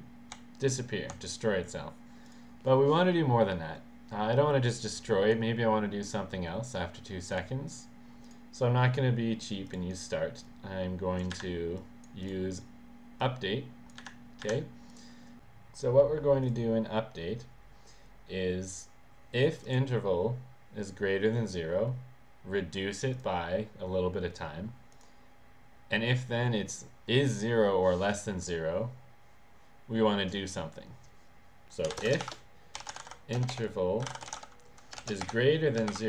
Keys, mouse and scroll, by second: 0.4 s, 2.3 click, 7.4 click, 8.3 click, 9.0 click, 9.7 click, 10.5 click, 11.4 Delete, 11.8 click, 12.2 click, 13.2 click, 14.0 Delete, 14.5 Delete, 14.9 click, 16.4 click, 19.5 click, 23.1 click, 24.9 click, 31.9-36.0 typing.